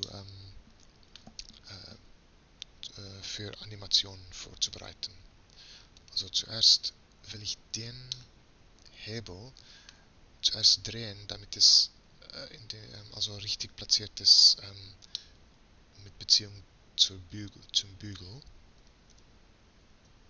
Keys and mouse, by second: 6.7-8.2 right drag, 17.0-18.8 middle drag, 18.8 r.